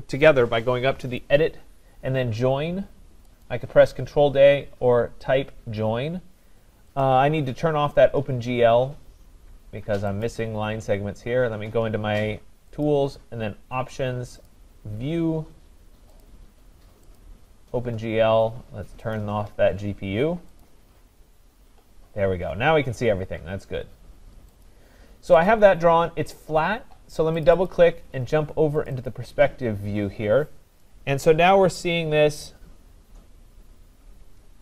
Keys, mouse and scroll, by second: 1.2 click, 3.4 click, 7.0 click, 10.2 click, 12.8 click, 14.5 click, 16.2 click, 17.2 click, 19.1 click, 20.6 click, 22.9-23.6 scroll, 24.6 click, 25.5 click, 27.4 click, 27.7 click, 28.9 click, 29.1 click, 29.7-30.4 scroll, 33.0 scroll down 3.